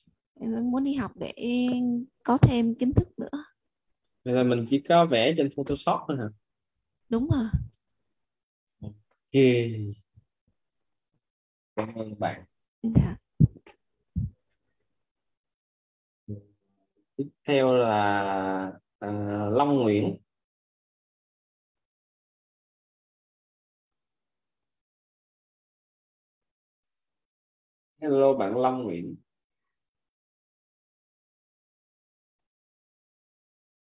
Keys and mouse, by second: 14.4 click, 18.9 Left, 32.7 click.